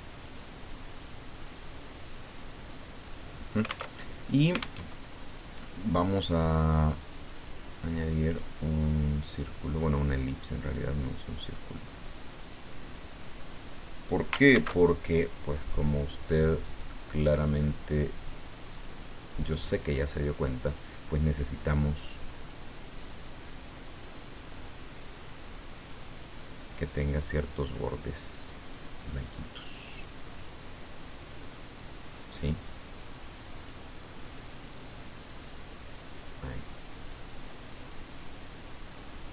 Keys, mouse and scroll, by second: 0.7-3.5 drag, 3.9 alt+Tab, 4.8 alt+Tab, 7.3 click, 9.7-13.7 drag, 14.5 ctrl+shift+c, 16.6 click, 18.7 click, 23.4 click, 25.1 click, 26.3-28.4 drag, 29.9 click, 32.7 click, 34.7 click, 37.1 click.